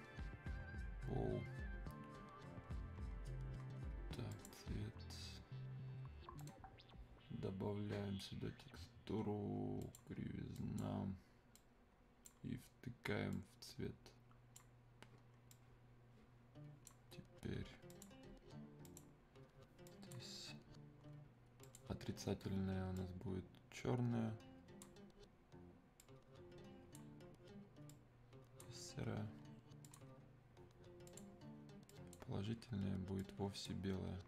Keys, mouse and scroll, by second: 0.2-1.5 scroll down 1, 1.5-2.4 scroll up 1, 4.3 click, 5.9-6.4 scroll up 1, 6.4 right click, 9.8-34.2 drag.